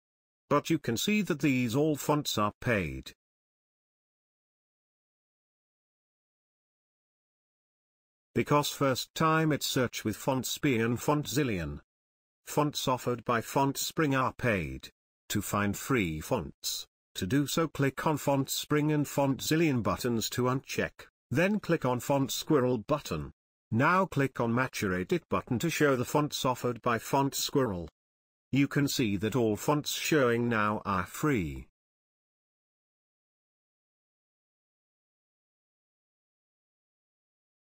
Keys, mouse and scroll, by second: 8.6-10.4 drag, 17.1 click, 24.4 click, 24.6-28.1 drag, 36.7 click, 36.8-37.3 drag.